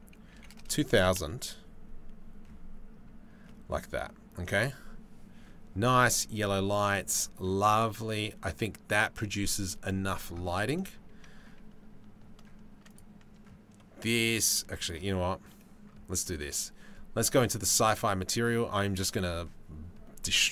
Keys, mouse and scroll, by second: 1.7 KP_0.